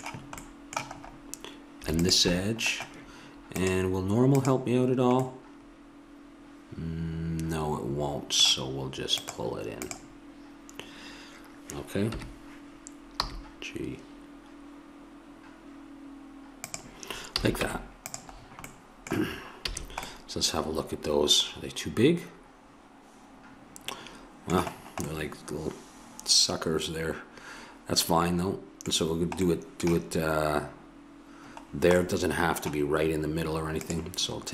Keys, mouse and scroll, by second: 2.0-5.3 drag, 7.3-9.2 middle drag, 9.2-12.1 drag, 12.1 KP_1, 13.2 g, 17.3 a, 17.6 Tab, 19.6 a, 21.9 middle click, 24.8-27.1 middle drag, 29.0-31.7 middle drag, 31.8 middle click, 32.2-34.5 middle drag.